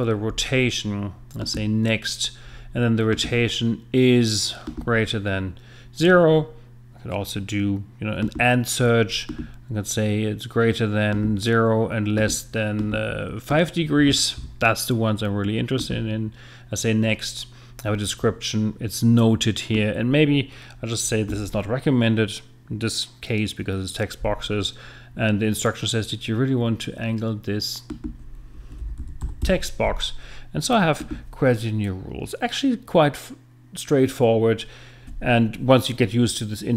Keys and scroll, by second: 14.4 5, 28.5 Right, 28.8-29.7 typing.